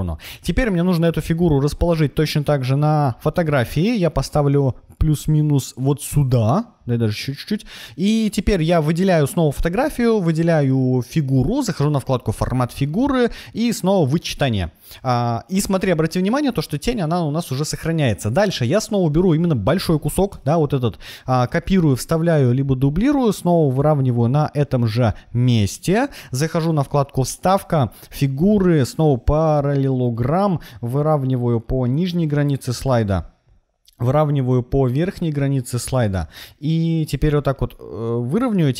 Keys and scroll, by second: 20.2 super+c, 21.4 super+v.